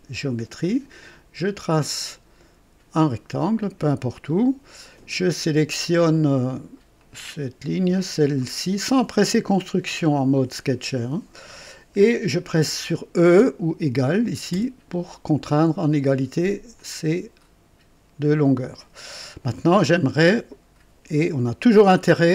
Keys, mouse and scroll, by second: 1.7 click, 2.9 click, 3.6 click, 4.1 right click, 7.0 click, 8.4 click, 14.5 e, 16.7-18.4 drag.